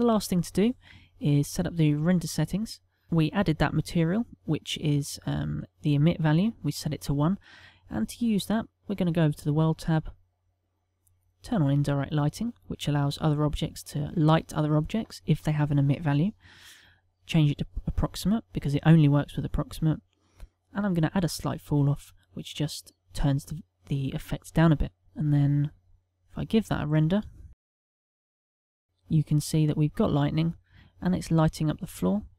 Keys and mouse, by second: 2.6 click, 3.6 click, 4.5 middle click, 6.5 middle click, 7.9 click, 9.3 middle click, 11.4 click, 17.8 click, 18.9 middle click, 20.7 click, 25.5 click, 27.5 F12.